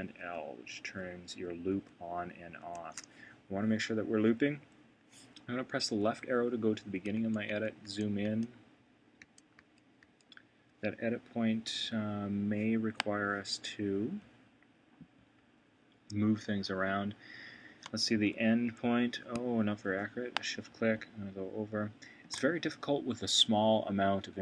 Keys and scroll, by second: 0.2 shift+super+l, 6.0 Left, 7.1 super+], 18.1 Right.